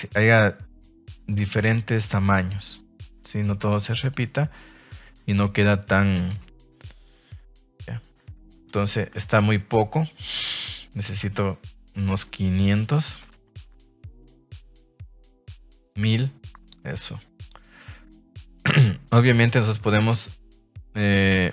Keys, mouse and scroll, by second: 5.1 middle click, 5.4 a, 5.6 a, 6.3 KP_0, 8.7 ctrl+s, 11.9-13.2 drag, 13.1 KP_0, 14.2-15.8 drag, 15.2 KP_0, 15.4 KP_0.